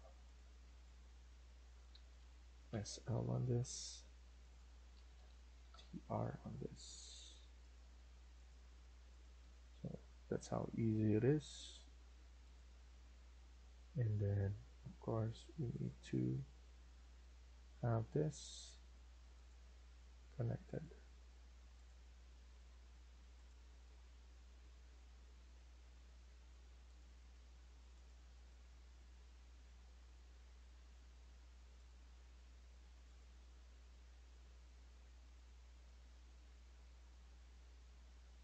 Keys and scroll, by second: 1.8 Escape, 2.0 Escape, 2.6-3.0 typing, 4.5 Escape, 4.8 Escape, 5.0 Escape, 5.2-5.9 typing, 9.3 Escape, 11.6 Escape, 18.5 Escape.